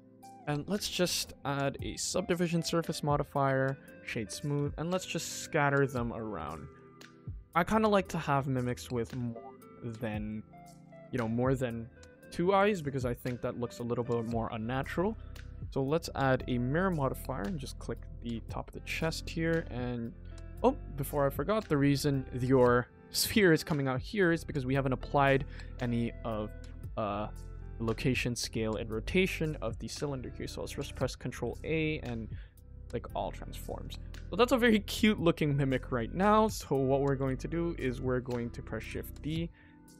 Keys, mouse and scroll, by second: 0.2 scroll up 1, 0.5 middle click, 0.8 shift+scroll up 1, 0.9 shift+middle click, 1.5 click, 3.0 click, 3.6 right click, 4.1 middle click, 4.5 g, 5.9 middle click, 6.3 g, 8.0 middle click, 8.5 g, 9.1 s, 9.8 click, 10.0 middle click, 10.7 middle click, 11.1 click, 12.7 click, 13.1 middle click, 13.5 g, 14.7 click, 16.0 click, 17.0 click, 17.6 click, 18.0 middle click, 18.9 middle click, 20.3 click, 20.7 middle click, 22.0 middle click, 23.7 middle click, 25.3 shift+middle click, 25.7 ctrl+s, 26.2-26.6 scroll down 2, 26.6-27.1 scroll up 1, 27.2 shift+middle click, 32.3 click, 32.7 middle click, 33.2 scroll down 2, 33.5 middle click, 33.9 scroll up 2, 34.2 middle click, 34.3-34.7 scroll down 2, 34.7 middle click, 35.4 click, 35.8 middle click, 36.2 g, 37.8 click, 38.1 middle click, 38.9 shift+d.